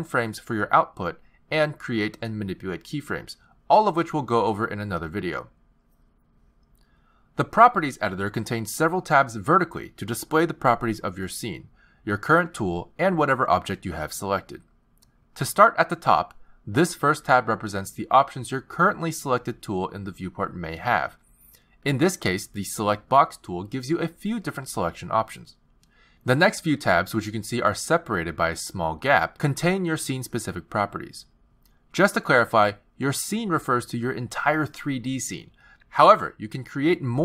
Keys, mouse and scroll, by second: 0.8 click, 2.9 click, 4.9 i, 6.8 click, 10.7 click, 17.3 click, 20.2 t, 21.1 click, 21.9 t.